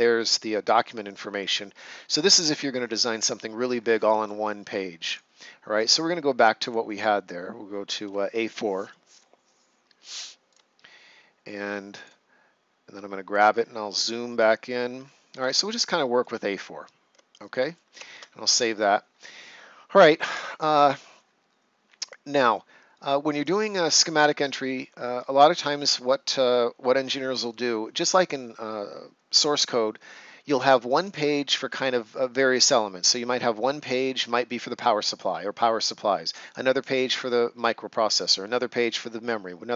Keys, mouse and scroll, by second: 0.7 scroll up 1, 1.5 right click, 2.1 ctrl+scroll up 1, 4.2 right click, 6.6 click, 9.0 click, 12.9 right click, 13.5-14.4 ctrl+scroll up 1, 15.5 right click, 16.4 ctrl+scroll up 1, 17.2 right click, 18.0 ctrl+s, 22.9 right click, 33.6 right click.